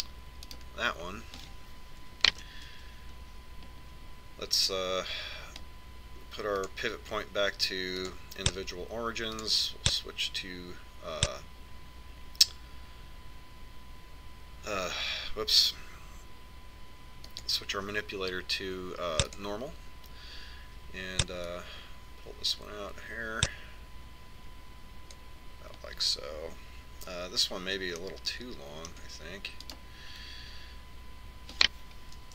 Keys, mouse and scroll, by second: 1.1 click, 1.6 middle click, 2.2 right click, 4.2 ctrl+KP_7, 8.4 click, 11.1 click, 19.1 click, 23.3 click, 29.9-31.7 middle drag, 31.5 right click.